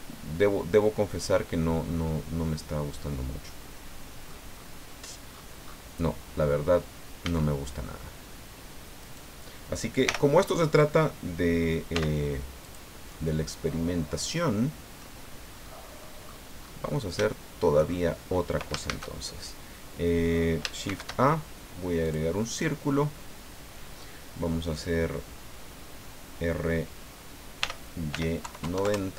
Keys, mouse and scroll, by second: 4.9-5.2 scroll down 1, 5.3-5.9 scroll up 2, 6.9-7.2 scroll down 2, 7.2 a, 9.0 right click, 10.0 l, 11.9 x, 12.6 click, 13.0 scroll down 2, 13.5-15.2 drag, 15.2 scroll down 1, 15.7 click, 16.3-16.9 scroll up 2, 17.3 shift+click, 18.9 shift+a, 20.8 shift+a, 22.0 click, 27.6 r, 28.1 y, 28.4 KP_9, 28.6 KP_0, 28.8 KP_Enter.